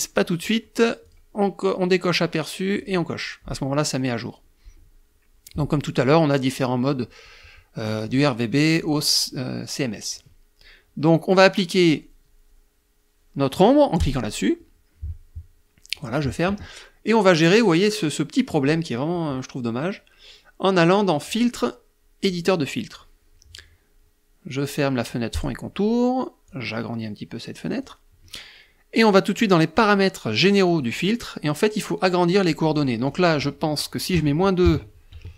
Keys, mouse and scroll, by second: 0.6 click, 2.3 click, 7.6 click, 8.3 click, 13.5 click, 15.4 click, 20.7 click, 21.7 click, 24.8 click, 26.0-27.5 drag, 30.1 click, 32.2 click, 33.6 KP_Subtract, 34.1 KP_2, 34.5 Tab.